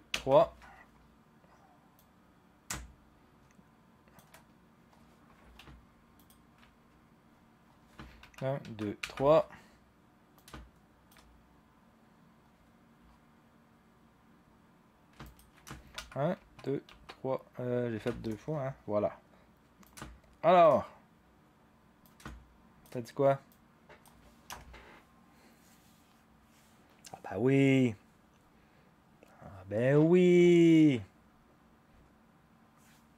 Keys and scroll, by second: 0.1 shift+Page_Down, 8.2 shift+Page_Down, 8.6 shift+Page_Down, 9.0 shift+Page_Down, 16.0 shift+Page_Up, 16.0 shift+Page_Down, 16.4 shift+Page_Down, 16.9 shift+Page_Down, 17.9 shift+Page_Down, 24.5 0.